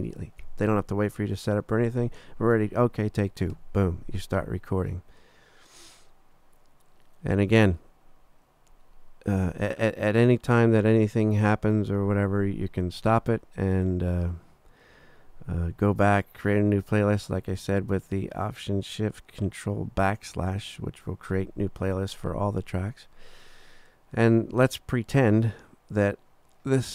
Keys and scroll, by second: 3.5 3.